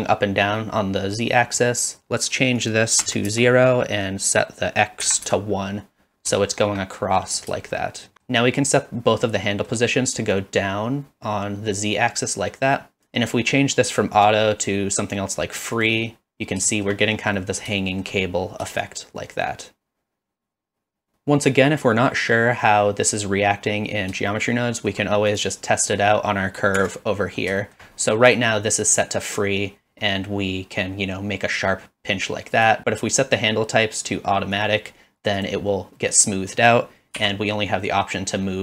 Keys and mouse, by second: 1.4 middle click, 2.7 click, 4.3-5.5 drag, 6.4 shift+middle drag, 7.1 middle click, 7.8 shift+middle click, 9.2-9.7 middle drag, 10.3-13.0 shift+drag, 14.2-15.8 drag, 16.7 shift+middle drag, 17.4 middle click, 17.8 shift+middle click, 18.9-21.1 shift+drag, 24.3-24.9 shift+middle drag, 25.3 click, 26.8 Tab, 27.6 shift+middle click, 28.1 click, 32.8-34.6 right drag, 35.4 click, 36.1 click.